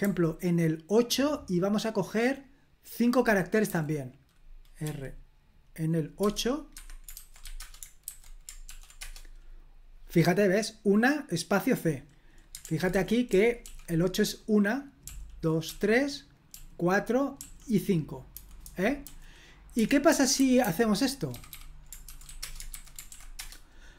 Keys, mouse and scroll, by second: 0.0 h, 3.6 h, 4.8 r, 6.2-7.9 typing, 6.7 Escape, 8.0 super+h, 8.6 ctrl+p, 8.9 Return, 12.6 super+l, 12.6-19.0 typing, 20.1-22.7 typing, 23.1 ctrl+p, 23.3 Return.